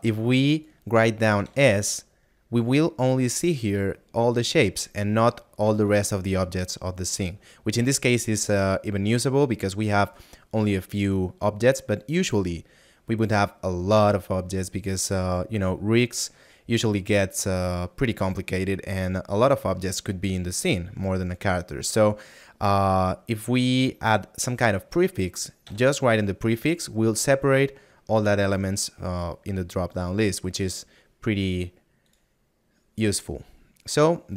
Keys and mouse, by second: 32.1 click.